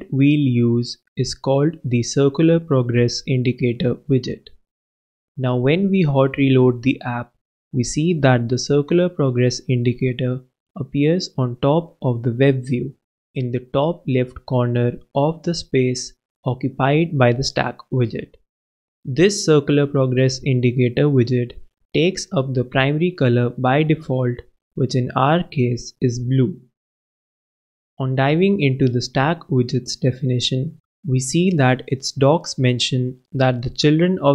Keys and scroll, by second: 0.0-0.8 typing, 1.7 shift+Return, 2.3-3.5 typing, 3.6 shift+super+,, 4.2 super+s, 30.5 super+b.